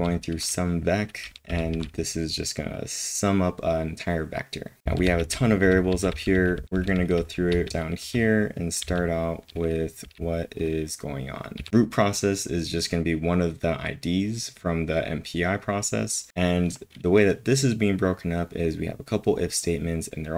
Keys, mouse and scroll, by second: 1.5-2.2 typing, 5.1-8.8 typing, 8.8 ctrl+l, 10.0 k, 11.6 j, 16.3 typing.